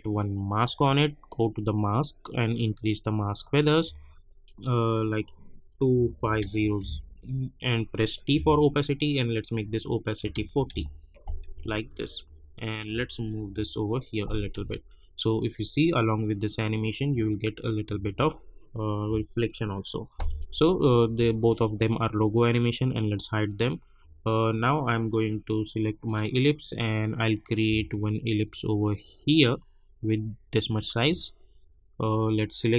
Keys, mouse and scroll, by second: 6.8 Return, 8.3 t, 10.0 click, 10.6 Return, 11.5 space, 12.6 click, 12.9 Up, 14.2 click, 14.5 space, 17.1 space, 20.2-32.0 drag.